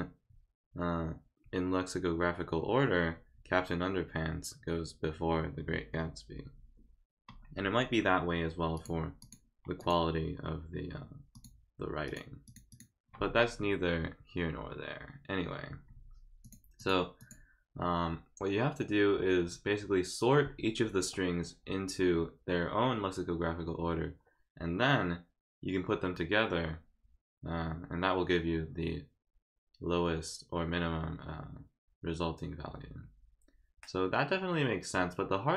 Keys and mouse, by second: 8.7 click, 9.2 click, 9.8 click, 11.3 click, 12.0 click, 12.4 click, 12.7 click, 16.4 click, 16.8 click, 17.2 click.